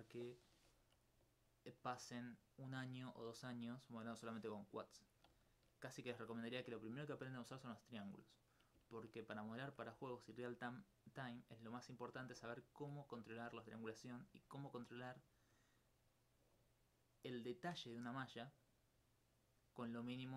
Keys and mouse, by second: 1.8-5.3 middle drag, 8.4 middle click, 9.0 ctrl+alt+click, 10.3 alt+click, 11.1 middle click, 12.3 alt+click, 12.6 alt+click, 14.5 alt+click, 14.8 alt+click, 15.8 alt+click.